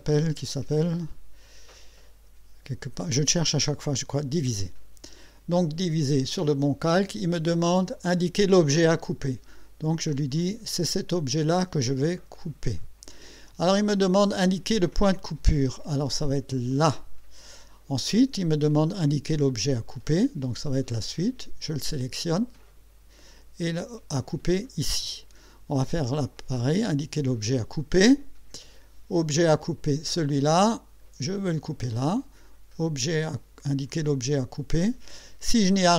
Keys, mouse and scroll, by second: 4.6 click, 12.3 click, 16.7 click, 22.6 click, 24.5 click, 29.7 click, 31.4 click.